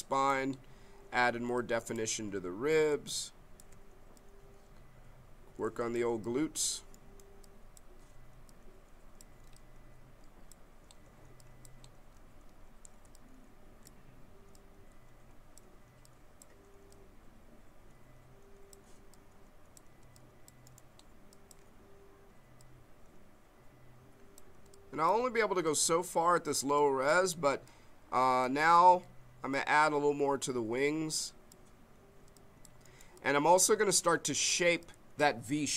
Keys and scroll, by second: 2.9 b, 13.0 b.